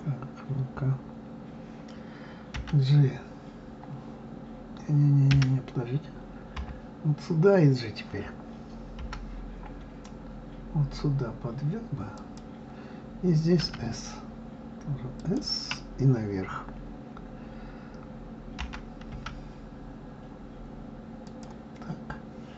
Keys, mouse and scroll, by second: 6.8 KP_3, 9.2 g.